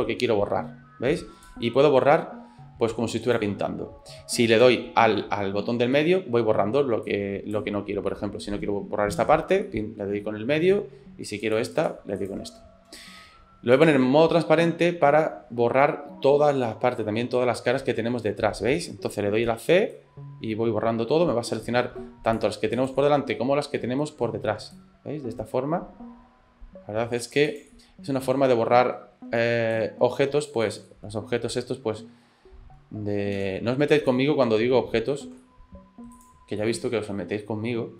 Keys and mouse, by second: 4.5 c, 13.8 click, 14.9-18.5 middle drag, 19.4 c, 23.0-24.3 middle drag, 24.5 c, 27.7-29.0 middle drag, 29.2 c, 30.9 middle click, 33.4 c, 36.6-37.9 middle drag.